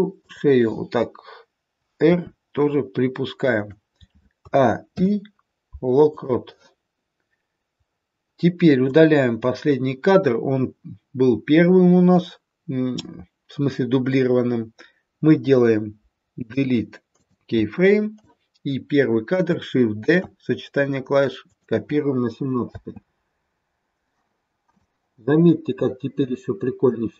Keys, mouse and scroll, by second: 0.1 click, 2.1 r, 4.4 a, 4.9 i, 8.8 click, 16.4 Delete, 18.2 click, 19.9 shift+d, 22.8 space, 24.8 click.